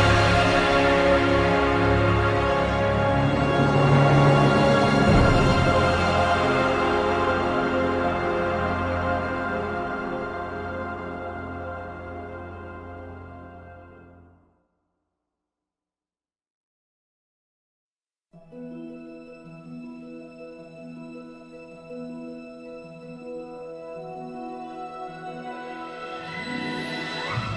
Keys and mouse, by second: 0.1 middle click, 0.4 alt+middle click, 0.6 alt+shift+s, 0.6 alt+middle click, 0.8 click, 0.9 alt+middle click, 1.1 KP_7, 1.8 shift+middle click, 1.9 shift+middle click, 2.2 KP_3, 2.4 shift+middle click, 2.7 shift+middle click, 3.2 click, 3.5 click, 4.6 click, 5.2 shift+middle click, 5.6 shift+middle click, 5.8 click, 6.0 alt+shift+middle click, 6.1 click, 7.0 click, 7.2 shift+middle drag, 7.3 alt+shift+middle click, 8.0 click, 8.4 alt+shift+middle click, 8.6 click, 8.7 alt+shift+middle click, 9.4 alt+shift+middle click, 10.0 alt+shift+middle click, 10.2 click, 10.2 e, 10.4 shift+middle click, 10.6 click, 11.8 alt+shift+middle click, 11.8 KP_6, 11.8 KP_7, 11.9 s, 12.2 alt+middle click, 12.4 click, 13.3 click, 13.5 alt+shift+middle click, 14.0 alt+shift+middle click, 14.2 s, 14.8 KP_7, 15.0 alt+shift+middle click, 15.2 KP_3, 15.4 click, 16.0 click, 16.8 click, 17.2 click, 17.7 alt+shift+middle click, 17.7 alt+shift+s, 17.9 shift+middle click, 18.1 alt+shift+middle click, 18.5 alt+shift+middle click, 18.8 alt+middle click, 19.3 alt+shift+middle click, 19.6 alt+shift+middle click, 19.7 alt+shift+middle click, 19.9 alt+shift+middle drag, 21.0 drag, 21.9 click, 22.8 alt+shift+middle click, 23.3 shift+middle click, 23.3 alt+shift+s, 23.4 click, 24.0 shift+middle click, 25.1 shift+e, 26.0 shift+middle click, 26.2 alt+shift+Tab, 26.2 alt+shift+middle click, 26.3 shift+middle click, 26.5 shift+middle click, 26.8 click, 27.1 click, 27.2 alt+shift+middle click.